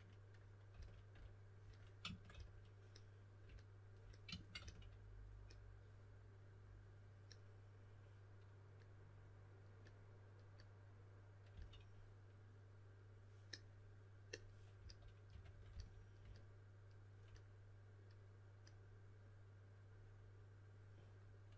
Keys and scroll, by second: 0.7 typing, 2.3 s, 4.5 s, 11.5 typing, 14.7-15.7 typing.